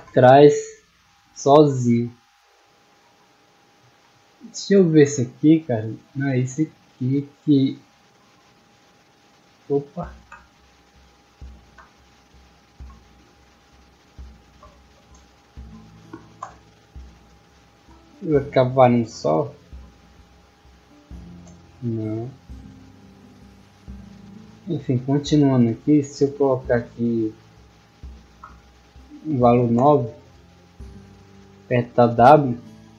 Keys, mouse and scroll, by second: 4.3-5.3 middle drag, 5.5 middle click, 6.8 click, 13.1 click, 16.9 w, 24.5 middle click, 26.1 click, 30.6-31.4 typing, 32.5 a.